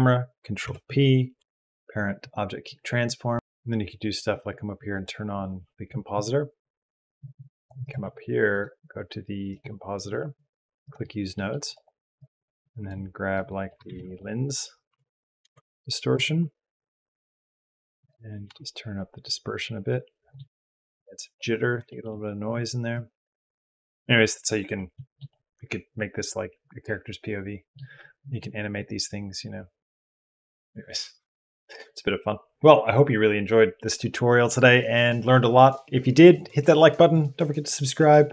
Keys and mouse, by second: 0.4 ctrl+p, 5.4 click, 7.0 click, 8.3-9.6 drag, 10.6 click, 11.1 middle click, 11.5 click, 12.0 click, 12.2 click, 12.7 click, 13.3 click, 13.5 click, 13.7 shift+a, 18.0-20.1 drag, 20.1 shift+middle click, 21.7 shift+middle click, 22.7 click, 24.5 middle click, 25.1-26.7 drag, 26.7 middle click, 26.8 click, 26.9 middle click, 26.9 click, 27.1 middle click, 27.2 click, 32.6-35.0 typing, 35.6 click, 36.1 ctrl+space, 37.4 ctrl+space, 37.4 click, 37.6 click, 37.9 ctrl+space, 38.0 s, 38.1 s, 38.2 s.